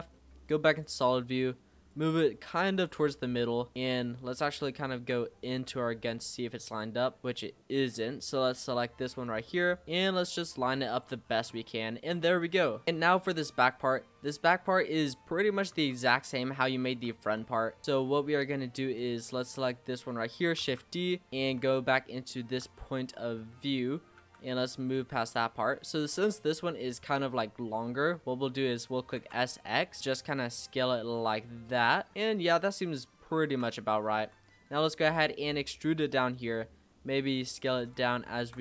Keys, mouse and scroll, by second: 0.1 middle click, 1.1 click, 2.2 e, 3.1 middle click, 3.8 scroll up 1, 3.9-5.3 middle drag, 5.3-5.7 scroll up 5, 5.7 middle click, 6.7 click, 7.1 l, 7.2 scroll down 3, 7.3-7.8 scroll up 3, 7.8 middle click, 8.7 l, 9.9 click, 11.2-12.2 scroll down 11, 11.6 middle click, 12.2 click, 12.5 scroll down 1, 12.6 middle click, 12.8-13.6 scroll up 1, 13.6 click, 14.2-15.8 scroll up 3, 15.8 Tab, 16.6 shift+middle click, 17.0 z, 17.9 click, 18.3 middle click, 19.0 click, 20.6 shift+d, 21.3 click, 21.3-21.7 scroll up 4, 21.7-22.8 shift+middle drag, 22.8-24.2 scroll up 2, 24.2 g, 25.6-27.7 scroll down 8, 27.7-28.0 scroll up 3, 28.0-29.2 middle drag, 29.2 s, 31.1 middle click, 31.7 scroll up 1, 31.8 middle click, 32.1 s, 32.3 click, 32.8-33.2 scroll down 3, 33.2 shift+middle click, 33.7-34.2 scroll up 3, 34.2 s, 35.1 e, 36.7 s, 38.0 shift+middle click.